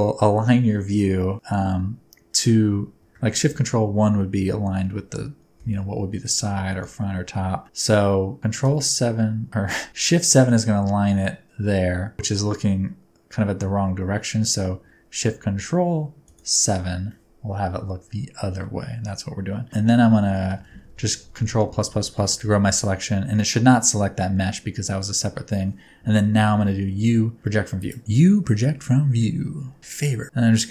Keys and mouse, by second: 8.6 ctrl+KP_7, 9.9 shift+KP_7, 20.2-22.3 ctrl+KP_Add, 26.3 u, 28.0 shift+click, 28.6 shift+a, 29.3 g, 29.8 s.